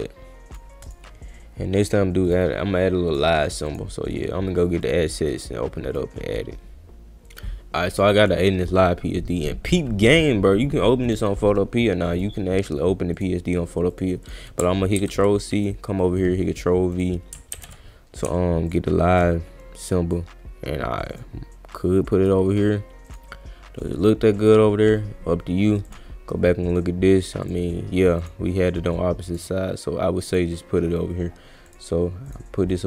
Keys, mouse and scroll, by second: 0.8 click, 1.8 click, 2.2 click, 3.0 click, 3.7 click, 4.8 click, 5.4 click, 7.9 click, 9.7 click, 11.0 click, 12.1 click, 13.2 click, 13.9 click, 14.2 click, 15.0 ctrl+c, 15.5 click, 16.9 click, 17.5 ctrl+v, 18.6-21.2 shift+drag, 21.7 click, 22.5 click, 23.1 click, 24.4 click, 25.9 click, 27.4 click, 28.2 click, 29.2 click, 30.3 click, 31.7 click, 32.3 click, 32.7-32.8 drag.